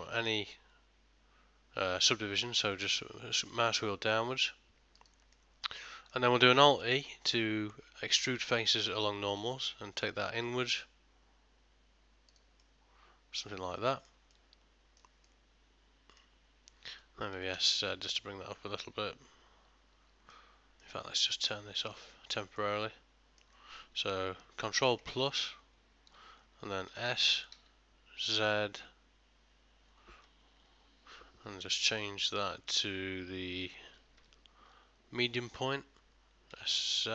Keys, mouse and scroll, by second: 5.4 middle click, 6.0 ctrl+middle click, 6.9 alt+e, 12.7 middle click, 14.3 middle click, 14.4 ctrl+middle click, 15.3 middle click, 17.4 s, 20.4 middle click, 21.9 click, 22.6 middle click, 25.1 ctrl+KP_Add, 26.9 s.